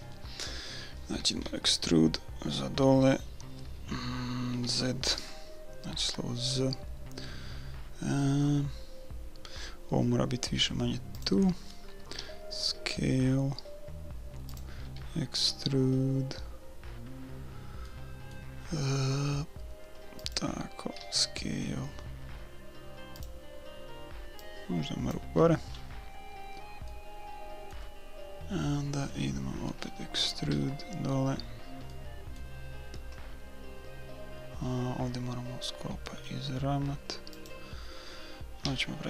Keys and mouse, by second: 1.4 e, 12.2 s, 14.9 e, 21.0 s, 24.4-26.4 drag, 25.7 middle click, 26.4-28.4 middle drag, 30.5 e, 38.6 s.